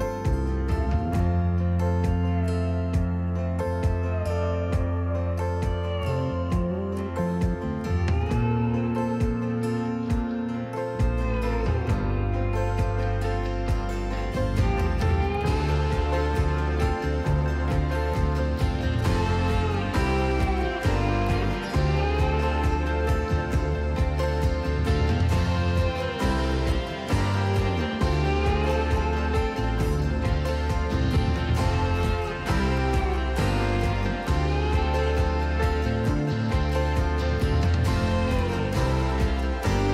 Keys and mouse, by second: 0.0 KP_0, 0.2 KP_Enter, 2.6 Tab, 5.6 middle click, 6.5 e, 7.1 y, 8.5 click, 9.8 Tab, 10.9-13.3 drag, 14.4 click, 15.5-18.1 drag, 19.6-20.8 drag, 22.5 click, 22.7 click, 23.3 click, 24.6 click, 25.8 click, 27.1 click, 33.8-36.6 drag, 37.6 KP_3, 39.8 g.